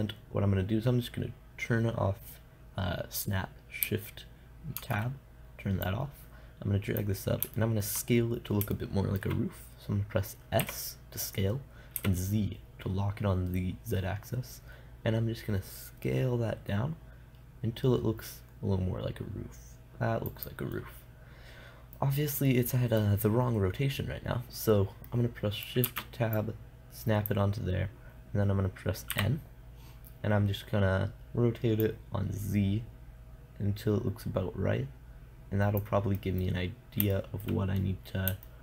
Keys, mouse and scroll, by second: 5.2 shift+Tab, 6.3 click, 8.1-11.0 middle drag, 11.0 s, 21.2-22.9 middle drag, 25.9 middle click, 26.3 shift+Tab, 26.8-28.3 drag, 29.7 n, 32.3-33.5 drag, 36.6-38.6 middle drag.